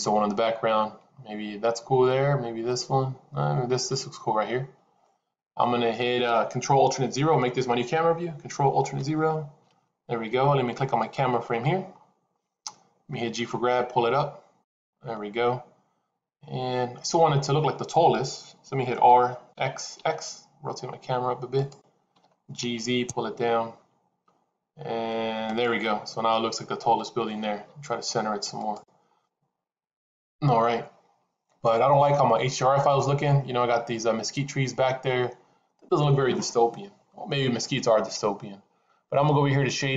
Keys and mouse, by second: 9.1 ctrl+alt+KP_0, 10.8-11.4 drag, 13.3 g, 18.8 r, 22.1 g, 27.4 g.